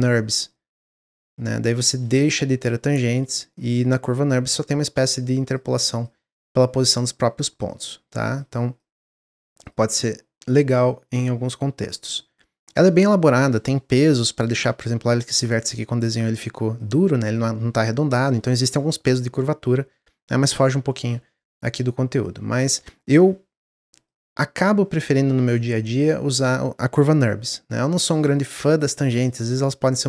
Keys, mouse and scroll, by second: 0.7-2.5 middle drag, 2.5 click, 3.4-9.6 drag, 11.0-15.0 drag, 15.4-21.6 drag, 27.3 click.